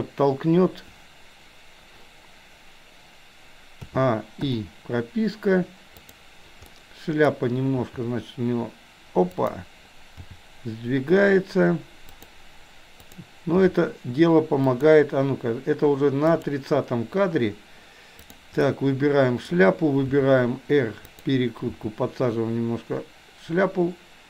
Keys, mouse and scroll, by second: 3.9 a, 4.5 i, 6.1 click, 6.7 middle click, 7.9 r, 10.2 g, 13.0 click, 13.6 g, 16.4 click, 18.1 click, 18.6-19.5 middle drag, 20.1 r, 21.7 g.